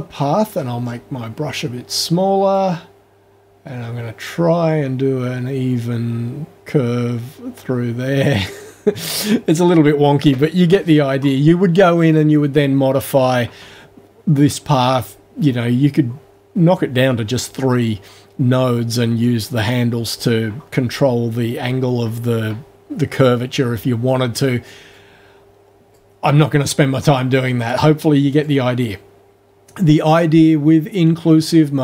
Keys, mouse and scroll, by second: 0.1-0.4 scroll up 1, 0.5-1.1 scroll down 1, 2.5-8.7 drag, 25.0-26.1 drag, 27.7 click, 28.3 click, 30.1-31.8 drag.